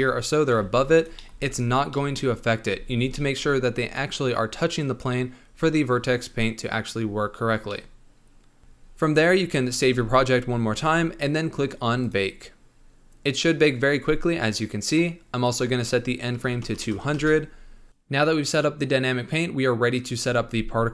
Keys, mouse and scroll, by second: 0.5 g, 1.1 middle click, 1.3 space, 1.9-2.7 middle drag, 2.7 space, 3.1-8.6 middle drag, 8.6-9.8 scroll down 11, 9.8 ctrl+s, 11.9-15.0 drag, 15.4-16.8 drag, 16.8 KP_0.